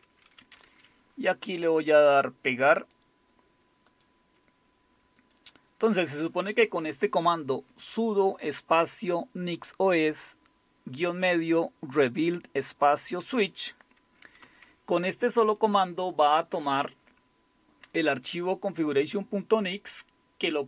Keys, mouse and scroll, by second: 2.8-3.9 right drag, 3.9 click, 5.2 click.